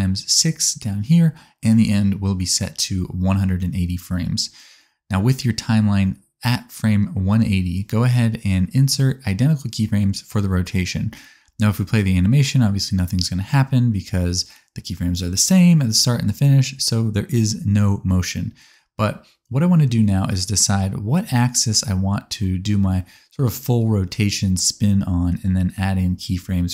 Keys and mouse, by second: 10.1 i, 11.7 space, 17.4 space, 25.1-26.1 drag, 26.1 middle click, 26.5-26.7 drag.